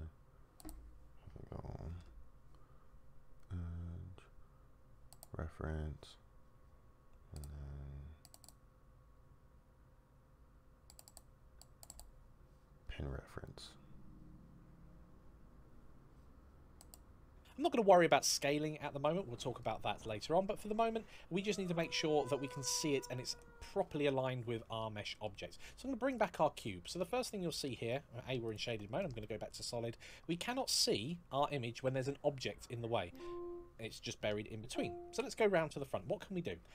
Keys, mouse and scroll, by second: 25.9 click, 26.9 middle click, 28.2 click, 32.9 middle click, 34.9 KP_1.